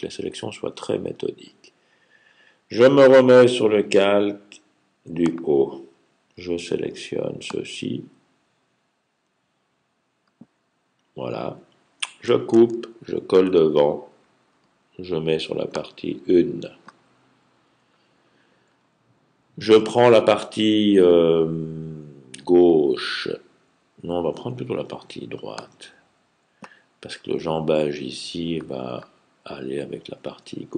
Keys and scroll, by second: 12.4 super+x, 13.2 f.